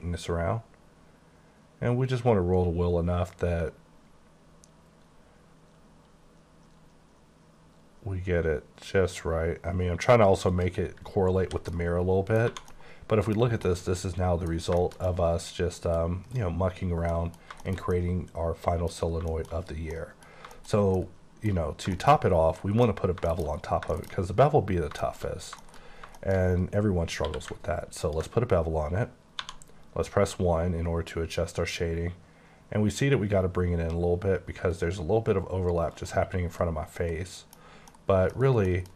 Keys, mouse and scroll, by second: 0.4-1.2 scroll down 1, 1.2-1.8 scroll down 2, 1.8-2.9 scroll down 3, 2.9-3.4 scroll up 4, 3.8-4.4 scroll up 2, 5.0 scroll up 2, 5.8-6.2 scroll up 2, 6.6 scroll up 1, 8.0 scroll up 1, 8.7 scroll up 1, 9.4-9.7 scroll up 1, 10.5 click, 11.4 h, 11.7 middle click, 12.5 1, 12.7 middle click, 13.4 scroll down 2, 13.7 middle click, 16.3 click, 17.1 middle click, 19.6-19.9 scroll up 3, 19.9 middle click, 20.3 scroll down 2, 20.5 shift+middle click, 21.2 middle click, 21.6-21.9 scroll down 2, 21.9 shift+middle click, 22.3 scroll up 4, 22.5 middle click, 23.0-23.6 scroll up 5, 23.2 shift+middle click, 23.4 shift+KP_1, 23.9 shift+middle click, 24.0 shift+KP_1, 24.5 scroll down 2, 25.0 shift+middle click, 25.2-26.1 shift+scroll up 5, 25.6 shift+middle click, 26.1 shift+middle click, 26.6-27.2 scroll up 5, 27.2 q, 28.1 ctrl+click, 29.4 1, 35.9 click, 36.3 scroll down 5, 36.6 middle click, 37.6 scroll down 2, 37.9 middle click, 38.3 scroll down 2, 38.6 middle click.